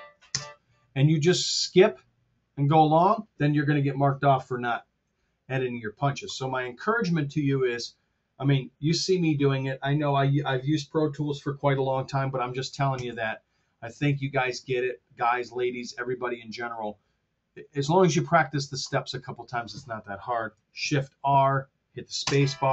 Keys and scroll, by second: 0.3 space, 13.0 super+z, 20.7 shift+r, 22.2 space.